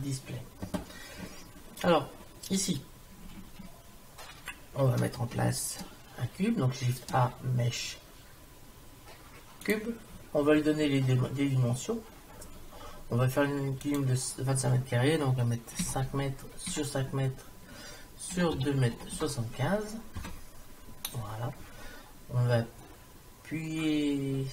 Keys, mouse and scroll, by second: 7.0 shift+a, 11.5-13.9 middle drag, 13.9-15.7 drag.